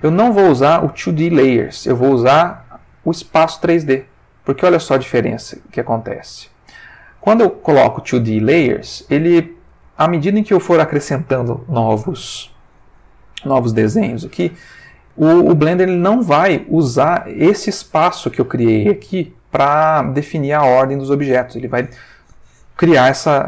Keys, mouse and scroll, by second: 1.7 click, 3.1 click, 4.9-6.3 drag, 7.5-9.9 middle drag, 13.0-13.7 middle drag, 13.9 middle click, 14.8-16.6 middle drag, 23.0 middle click.